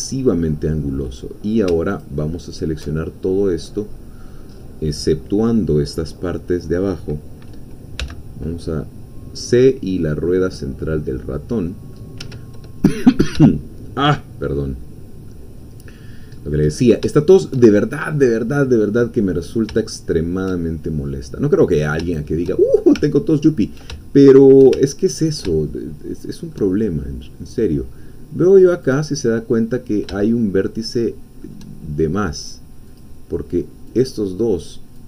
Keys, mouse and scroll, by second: 1.9 alt+shift+click, 3.1-4.5 alt+shift+scroll down 1, 4.5 scroll up 1, 4.8 scroll down 1, 5.0-6.6 drag, 8.0 c, 8.6-12.1 drag, 12.2 Escape, 12.8-13.3 scroll down 2, 13.5-15.6 shift+middle drag, 15.6-15.9 scroll down 1, 15.9 middle click, 16.6-17.0 scroll up 1, 17.1 shift+middle click, 19.2 middle click, 19.7-22.0 shift+drag, 22.1 shift+click, 22.2 shift+middle click, 22.8 shift+click, 24.0-25.2 ctrl+shift+drag, 25.2-26.6 ctrl+shift+middle drag, 28.8 click, 29.6 middle click, 30.3-31.6 shift+middle drag, 33.0-34.2 drag.